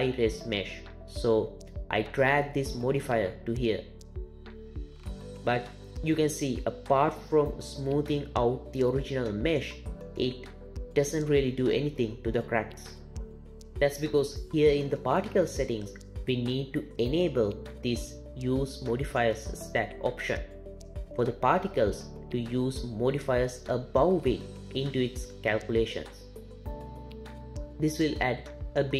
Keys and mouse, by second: 1.5-3.3 drag, 10.5 click, 11.4-15.4 drag.